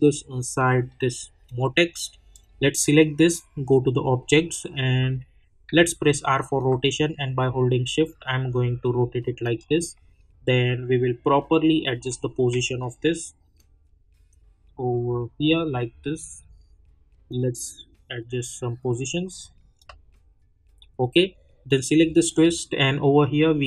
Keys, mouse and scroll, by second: 5.6 r, 6.6-9.9 drag, 9.9 middle click, 12.0 scroll up 1, 12.5 e, 13.5-16.6 drag, 16.6-17.0 scroll up 1, 17.3-23.6 drag.